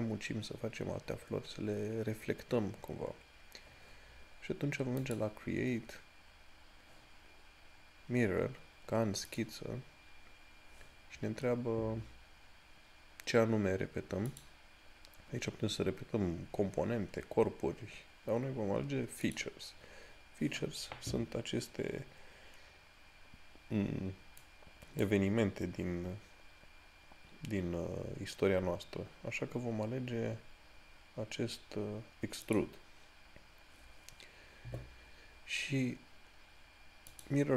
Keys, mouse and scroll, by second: 5.4 click, 9.6 click, 14.8 click, 19.5 click, 24.8 right click, 32.7 click, 37.4 click.